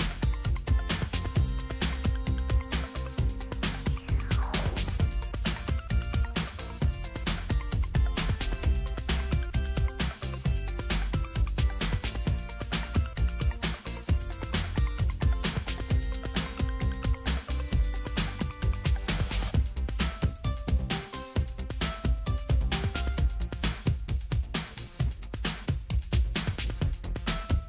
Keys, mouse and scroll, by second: 3.1 click, 5.4 click, 8.0 click, 10.0 click, 13.1 ctrl+c, 15.5 ctrl+v, 17.7 click, 23.2 click, 24.4-25.4 ctrl+scroll down 2, 25.4 ctrl+middle click, 25.6-26.0 ctrl+scroll down 2, 27.4 right click.